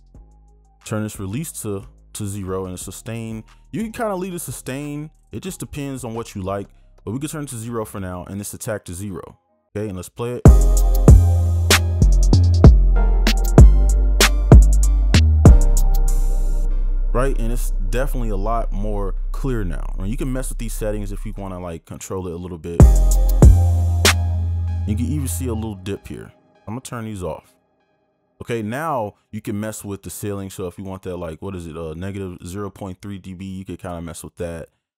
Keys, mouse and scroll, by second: 0.6 scroll down 1, 1.2 scroll down 1, 2.9 scroll down 1, 6.0 scroll down 1, 8.5 scroll down 1, 10.3 scroll down 1, 10.5 space, 16.7 space, 22.9 space, 24.3 space.